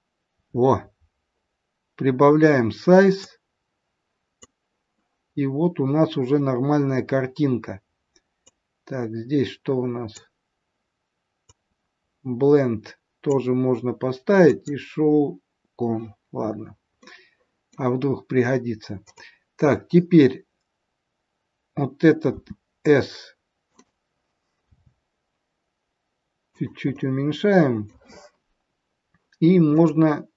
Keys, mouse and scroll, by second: 3.2 click, 5.2-5.6 scroll up 3, 8.3 click, 16.2-16.6 scroll down 3, 17.1 middle click, 19.0 click, 22.2 s, 24.5 g, 26.8 middle click, 29.7 click.